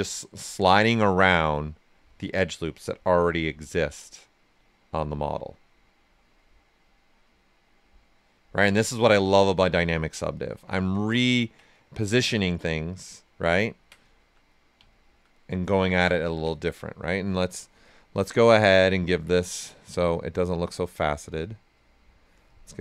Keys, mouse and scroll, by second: 0.0 ctrl+right click, 0.7-3.5 right drag, 3.5-5.1 drag, 5.1-7.2 right drag, 7.2-8.8 drag, 8.8 ctrl+right click, 9.2 right click, 10.8 right click, 11.7 right click, 14.9 alt+right click, 15.4 right click, 17.4-19.8 drag, 20.7 click.